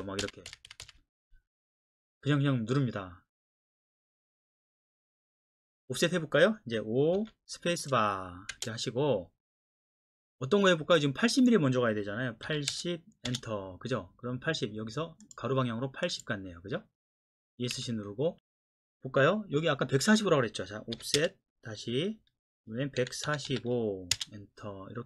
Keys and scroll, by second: 0.2 Escape, 0.5 Escape, 0.8 typing, 4.1 typing, 7.2 o, 8.5 space, 12.5 KP_8, 12.7 KP_0, 13.3 Return, 17.7 Escape, 21.0 o, 21.2 Return, 23.0 KP_1, 23.3 KP_4, 23.5 KP_5, 24.1 Return.